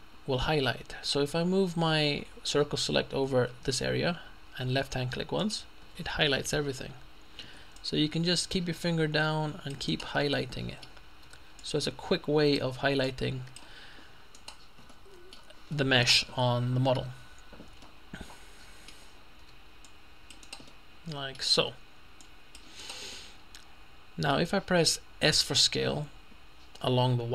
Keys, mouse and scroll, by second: 7.4-7.8 scroll up 2, 7.8 middle click, 8.0-10.5 drag, 10.0 right click, 10.2 middle click, 11.3 c, 11.6 click, 14.4 right click, 14.5 middle click, 15.0 click, 15.8 middle click, 17.9-19.4 middle drag, 19.4 c, 19.9-21.1 drag, 20.7 middle click, 20.7 right click, 21.6 c, 22.2-23.4 drag, 22.8 right click, 23.2 middle click, 25.8 s.